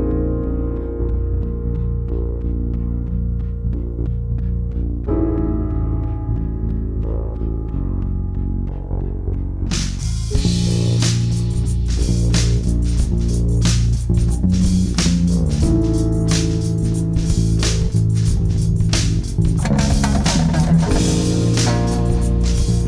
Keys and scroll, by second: 0.7 g, 8.7 space, 14.3 ctrl+q.